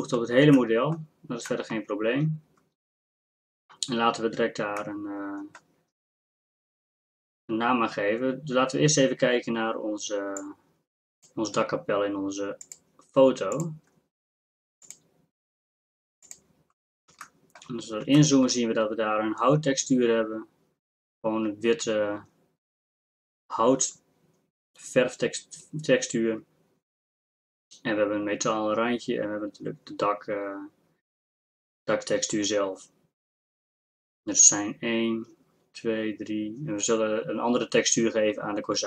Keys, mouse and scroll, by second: 10.4 click, 10.8 click.